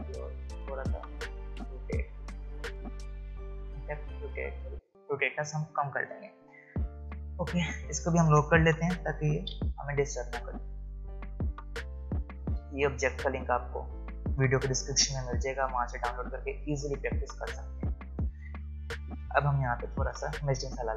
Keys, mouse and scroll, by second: 9.4 ctrl+2, 11.6 space, 11.9 click, 12.1 space, 14.9 typing, 17.7 space.